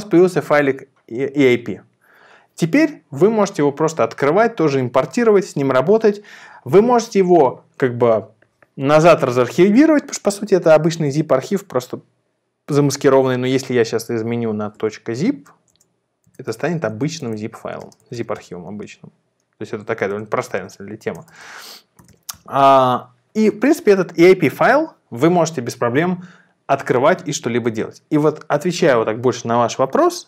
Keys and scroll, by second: 14.1 Return, 14.1 Right, 14.8 Right, 15.1 Right, 15.3 Right, 15.4-18.5 typing, 18.9 Return, 20.1 Return, 20.1 Right, 20.5 Right, 20.7 Right, 20.9 Right, 21.1-22.5 typing, 22.9 Return.